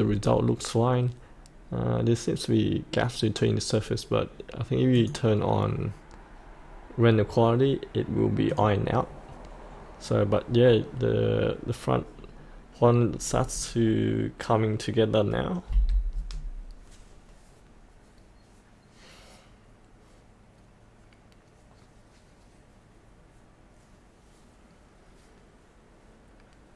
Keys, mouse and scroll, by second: 4.9 click, 15.6 F8.